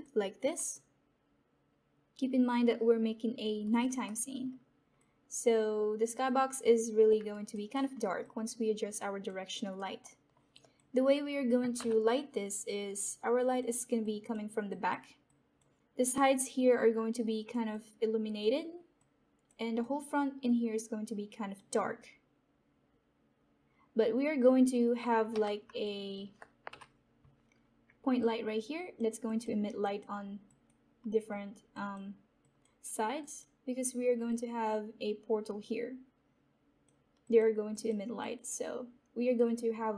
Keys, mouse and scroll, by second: 0.3 alt+click, 2.6 typing, 3.6 alt+right click, 4.0 alt+middle click, 4.5 alt+middle click, 4.9-7.2 drag, 7.2 alt+right click, 7.8 alt+middle click, 8.2-9.5 alt+drag, 9.5 alt+right click, 9.9 alt+middle click, 10.5 alt+click, 11.9 typing, 13.4-17.6 alt+drag, 13.4 typing, 17.6-25.3 alt+drag, 25.3 Escape, 25.8 alt+click, 35.2 typing.